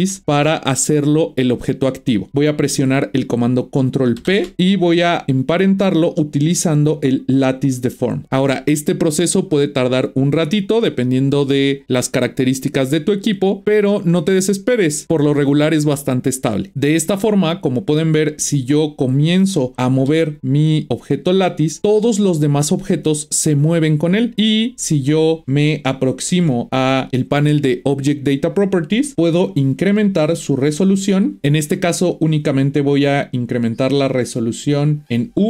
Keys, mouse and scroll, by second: 4.2 ctrl+p, 17.2-18.5 middle drag, 18.5 click, 19.1 click, 20.0 g, 25.7-27.5 shift+middle drag, 29.1 click, 31.4-32.9 drag.